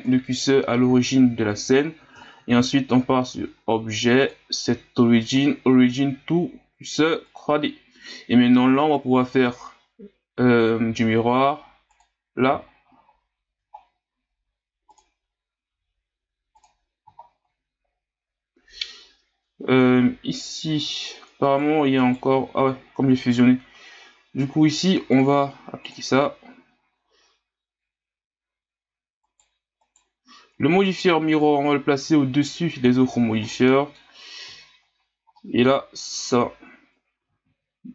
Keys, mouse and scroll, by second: 0.0 KP_1, 0.9 scroll up 7, 1.5 scroll down 5, 1.8-2.2 scroll up 6, 2.2-4.2 scroll down 6, 4.2-7.2 drag, 9.2-12.2 drag, 12.7 scroll down 1, 13.0 scroll up 2, 13.7 scroll up 1, 14.9-17.2 drag, 17.2-17.8 scroll down 1, 17.8-20.8 scroll up 1, 21.4 right click, 22.0 right click, 25.1-28.1 drag, 29.2 right click, 29.8 right click, 31.4-32.4 drag, 33.5-34.5 middle drag, 34.5 scroll down 4, 35.1 scroll down 2, 35.4-36.2 middle drag, 36.2 Tab, 37.2 a, 37.4 a.